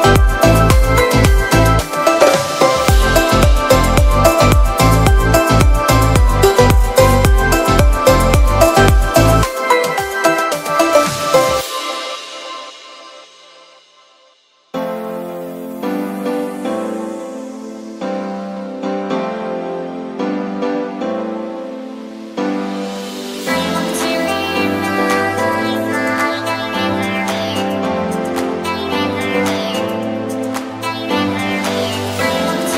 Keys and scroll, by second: 0.9 [, 2.9 ], 4.2 [, 9.3 ], 10.1 ], 10.8 [, 12.3 [, 13.6 [, 16.4 ], 17.1 [, 19.2 ], 19.7 [, 22.5 ], 25.2-29.0 typing.